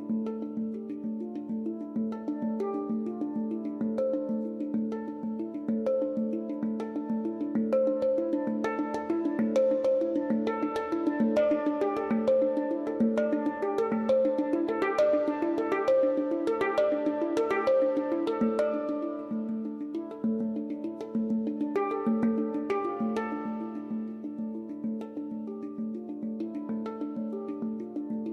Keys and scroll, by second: 9.3 ctrl+z.